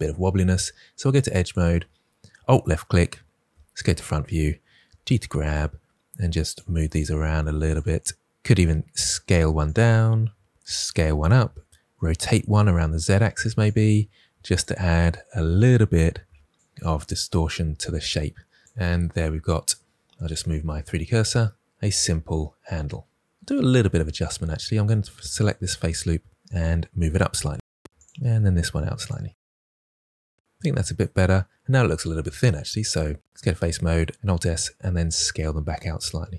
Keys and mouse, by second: 1.3 click, 3.7 KP_1, 4.8 g, 5.3 click, 6.8 g, 7.6 click, 8.2 g, 8.5 s, 9.6 click, 11.3 s, 11.9 r, 12.4 z, 13.3 click, 15.0 r, 15.5 x, 16.7 click, 18.6 Tab, 20.1 right click, 23.7 Tab, 24.2 3, 25.6 KP_1, 26.4 g, 27.2 click, 27.7 2, 28.0 g, 28.3 click, 29.6 g, 30.2 Tab, 33.3 Tab, 33.3 3, 33.3 a, 34.1 alt+s.